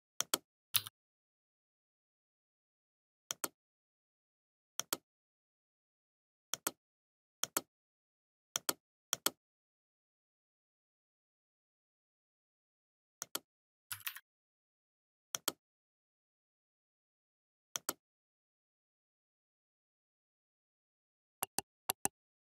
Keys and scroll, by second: 2.6 0, 5.0 ctrl+[, 18.4 ctrl+[, 21.1 Down.